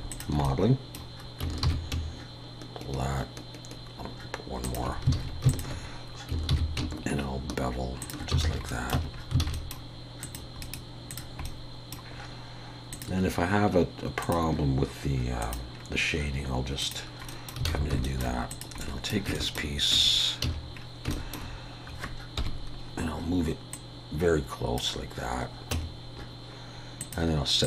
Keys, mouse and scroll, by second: 0.1 shift+click, 0.4 middle click, 1.7 ctrl+b, 5.2 alt+a, 5.5 alt+shift+click, 6.5 ctrl+b, 8.4 alt+a, 8.7 middle click, 8.9 Tab, 9.1-9.5 scroll down 3, 9.4 alt+a, 9.5 middle click, 10.2 click, 10.6 right click, 11.5 middle click, 12.9 click, 15.7-16.8 scroll down 1, 16.8 click, 16.8-17.3 scroll down 1, 17.3 middle click, 17.7 alt+a, 18.0 shift+middle click, 18.5 click, 18.8 middle click, 19.4 shift+middle click, 20.0 Tab, 20.4 a, 20.7-21.1 scroll down 2, 21.1 shift+middle click, 22.4 KP_1, 23.7 click, 25.7 Tab, 27.0 click.